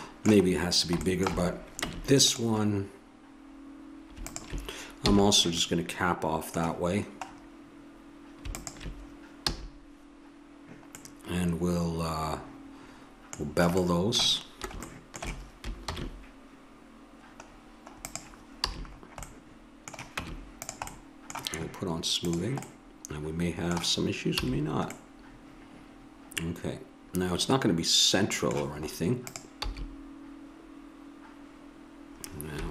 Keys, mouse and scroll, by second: 1.8 Tab, 5.2 f, 5.6 middle click, 8.5-10.3 drag, 9.5 f, 11.0 middle click, 15.9 ctrl+b, 19.1 a, 20.2 Tab, 22.2-23.4 drag, 24.4 a, 29.3-31.1 drag, 29.6 s.